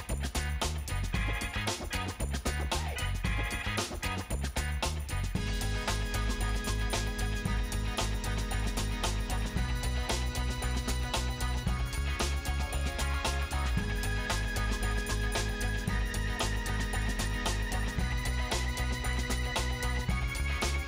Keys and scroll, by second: 17.1 Delete.